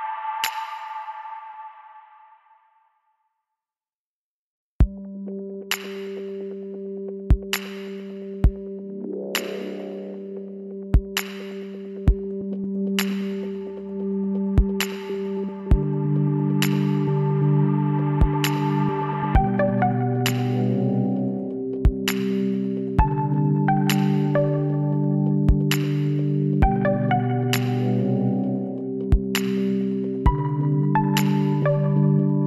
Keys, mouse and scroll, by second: 9.1-10.3 middle drag, 10.3 g, 18.0-21.5 middle drag, 22.0-24.1 middle drag, 24.1-26.0 drag, 25.7 z, 26.8-30.5 right drag, 30.0 s.